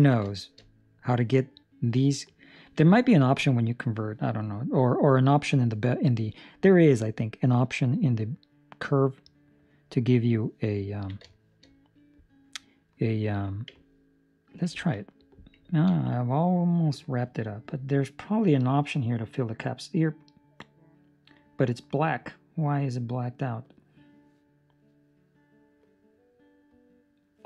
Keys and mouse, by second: 0.3 shift+middle click, 0.8 middle click, 9.5 ctrl+middle click, 10.8 ctrl+middle click, 11.3 shift+middle click, 11.4 shift+middle click, 11.8 middle click, 13.7 Tab, 14.3 right click, 14.7 ctrl+middle click, 14.9 middle click, 15.9 ctrl+space, 17.5 middle click, 22.7 middle click, 26.0 middle click.